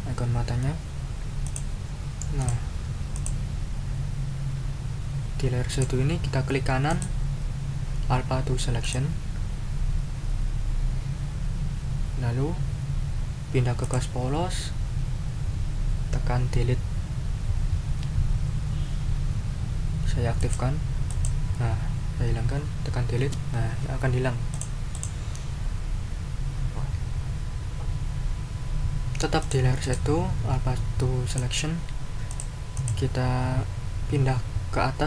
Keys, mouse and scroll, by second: 1.4 click, 2.4 click, 3.1 click, 5.7 click, 6.9 right click, 8.8 click, 13.8 click, 20.4 click, 21.1-21.4 scroll up 2, 23.2 Delete, 24.5 click, 24.9 click, 29.4 click, 29.8 right click, 31.3 click, 32.3 click, 32.7 click.